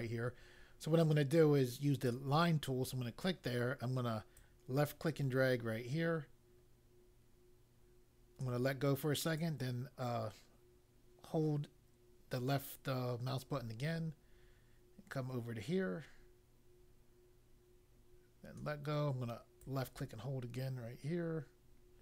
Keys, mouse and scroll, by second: 2.0 click, 4.3 click, 9.3 click, 19.5 click.